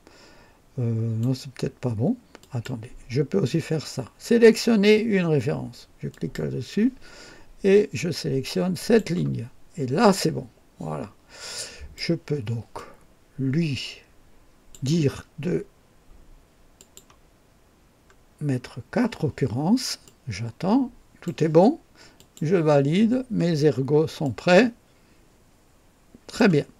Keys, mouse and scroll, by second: 2.4 click, 6.1 click, 8.8 click, 10.1-12.1 drag, 12.7-14.9 drag, 16.7 click, 17.6 scroll up 1, 18.4 scroll up 1, 20.0-21.4 drag, 22.1 click, 23.6-23.9 scroll down 1, 24.2-26.5 drag.